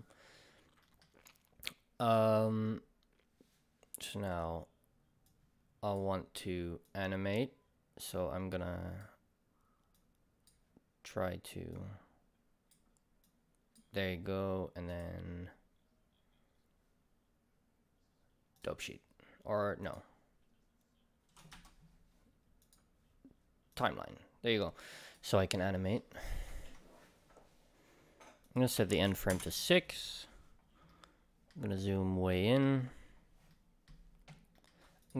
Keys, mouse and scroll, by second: 0.1-2.0 middle drag, 2.0-25.0 drag, 21.5 Escape, 25.6-26.1 middle drag, 26.1-30.9 drag, 29.4 Return, 30.4-30.9 scroll up 2, 30.9-35.0 middle drag, 31.8-32.2 scroll up 2, 33.0 scroll up 1, 34.3 scroll up 1, 35.0 click.